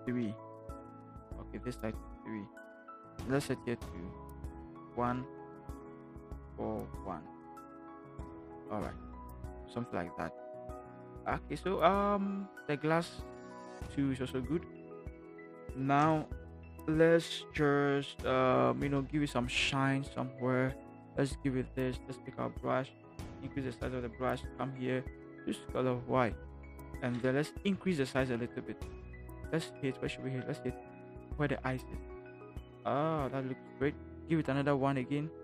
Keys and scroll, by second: 0.5 3, 5.1 1, 22.3 b, 23.8 ], 23.9 ], 27.5 ], 27.7 ], 27.8 ], 28.0 ].